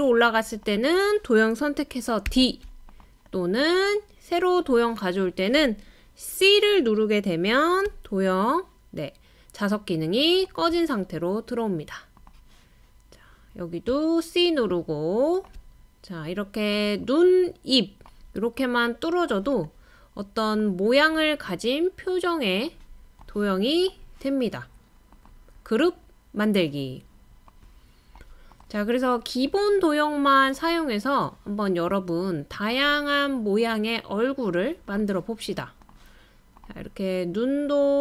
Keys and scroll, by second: 2.3 typing, 7.9-8.7 typing.